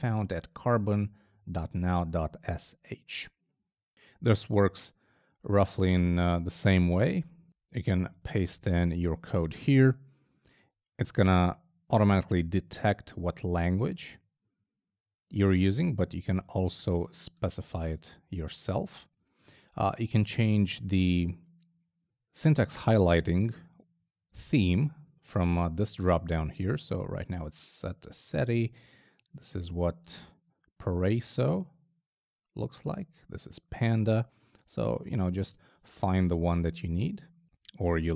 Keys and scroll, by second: 7.8 super+v.